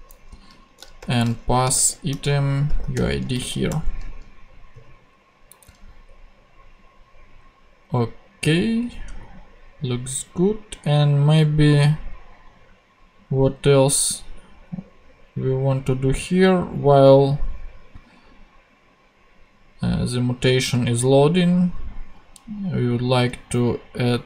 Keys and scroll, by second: 1.0-3.1 typing, 3.3 super+Right, 3.7 super+;, 4.6 ;.